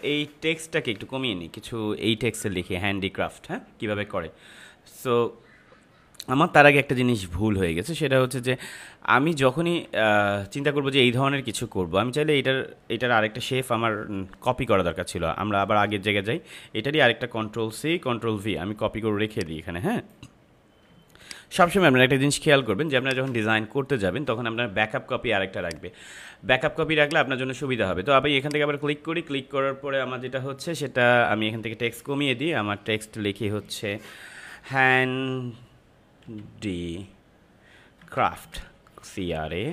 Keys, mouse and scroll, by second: 13.7 ctrl+z, 17.7 ctrl+c, 18.0 ctrl+v, 19.2-20.9 drag, 20.9 space, 21.2 click, 21.4 space, 22.9 click, 23.2 space, 27.0 click, 32.8-34.0 scroll up 1, 34.5 shift+h, 34.6 shift+a, 36.2 typing, 37.9-39.3 typing.